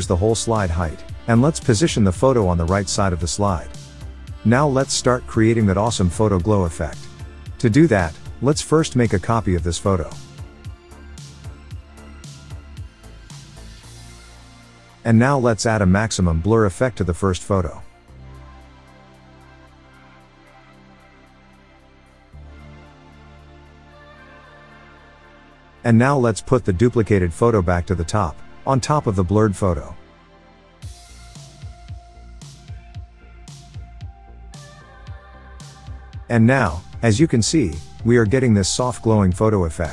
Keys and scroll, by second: 23.5 Tab.